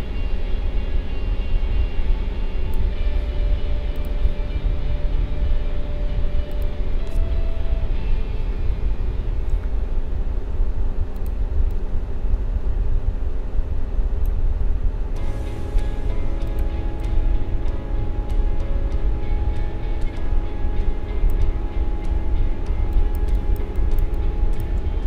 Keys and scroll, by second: 22.8 space.